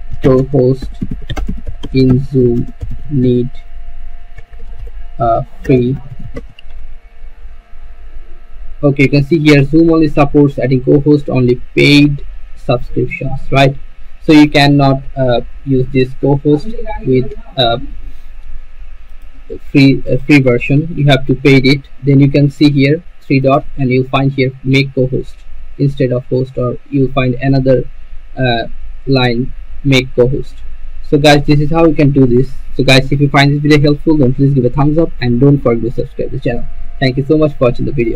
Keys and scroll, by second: 0.7-5.8 typing, 7.6 Return.